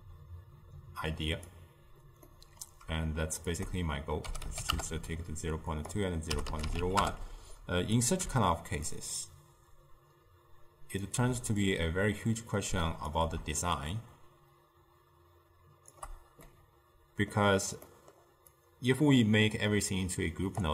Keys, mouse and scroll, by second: 2.4-3.6 middle drag, 3.6-8.8 shift+drag, 9.0-16.5 shift+drag, 16.5-18.6 middle drag, 18.6 click.